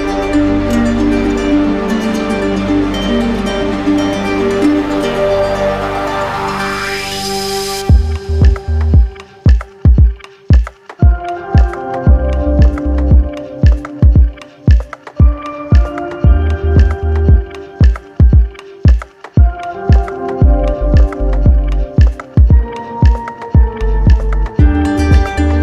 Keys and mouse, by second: 0.0 click, 8.3 click, 9.5 w, 13.8 click, 15.0 right click, 15.5 q, 16.9 ctrl+click, 18.2 ctrl+click, 18.7 ctrl+w, 20.9-22.9 right drag, 23.0 alt+right click, 25.2 right click.